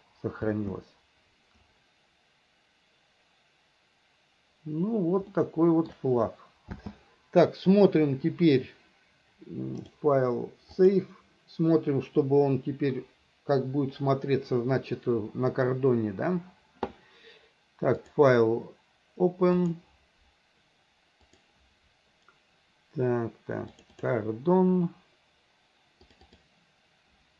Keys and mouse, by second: 0.6 space, 5.5 shift+middle click, 6.9 space, 10.0-11.1 drag, 18.2-20.1 drag.